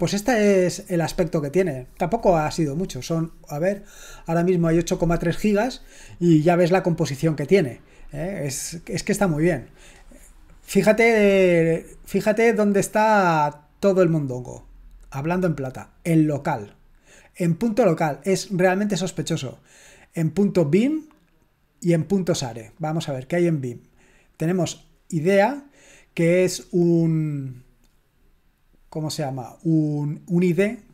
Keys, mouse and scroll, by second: 13.3-13.8 scroll down 1, 13.8-15.0 scroll up 1, 17.6 click, 22.5 click.